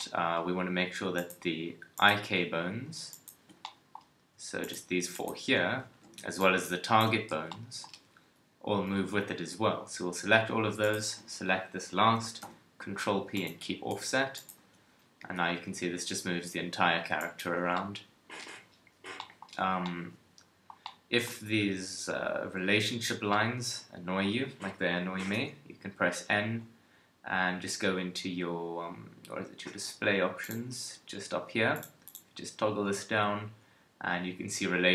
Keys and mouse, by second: 5.8 z, 6.2 b, 7.3 z, 12.4 ctrl+p, 13.9 Tab, 14.6 KP_3, 15.2 g, 17.6 a, 25.3 n, 30.4-34.9 drag.